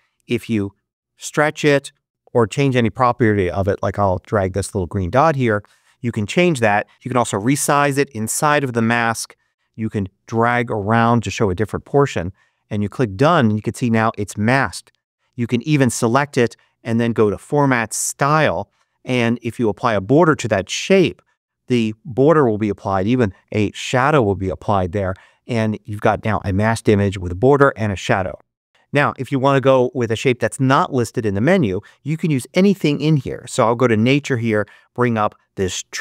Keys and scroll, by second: 2.1 super+z.